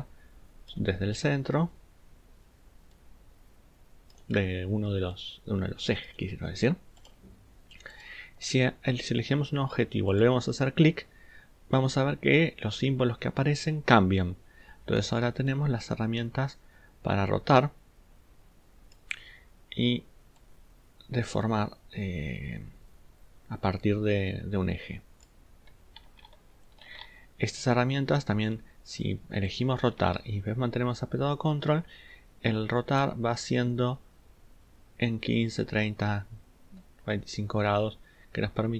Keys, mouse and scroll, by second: 26.0 ctrl+z, 26.9 ctrl+z.